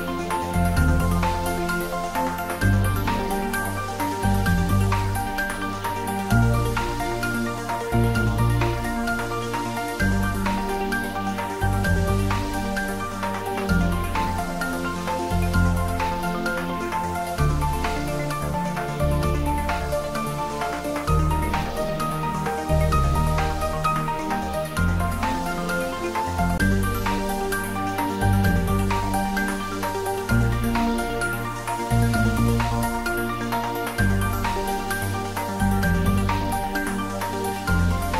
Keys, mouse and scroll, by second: 0.4 s, 0.8 z, 4.0 click, 4.6 scroll up 1, 5.2 `, 5.5 3, 6.3 scroll up 1, 7.2-8.1 typing, 9.5 click, 10.5 g, 12.3 click, 12.7 s, 13.0 z, 14.3 click, 15.0 g, 15.3 z, 19.1 click, 19.4 scroll down 1, 19.8-21.0 middle drag, 21.3-23.2 middle drag, 25.1 click, 26.5 g, 26.9 y, 28.3 x, 30.8 click, 31.2-31.5 scroll down 1, 31.5-33.4 middle drag, 33.4 scroll up 1, 37.9-38.1 scroll up 1.